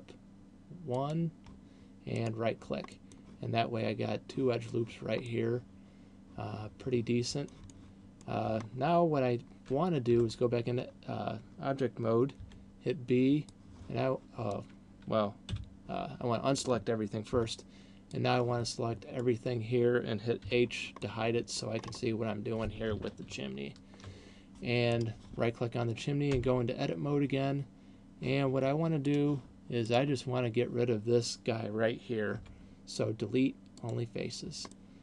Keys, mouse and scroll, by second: 1.4 click, 2.4 right click, 3.1 middle click, 5.4 middle click, 7.9 middle click, 8.9-9.3 scroll down 4, 10.6 Tab, 12.6 b, 15.9 a, 17.6 b, 20.6 h, 21.1 middle click, 22.4 scroll up 5, 23.6-24.4 ctrl+KP_8, 25.4 right click, 26.6 Tab, 29.4 click, 30.1 right click, 32.6 Delete, 34.9 middle click.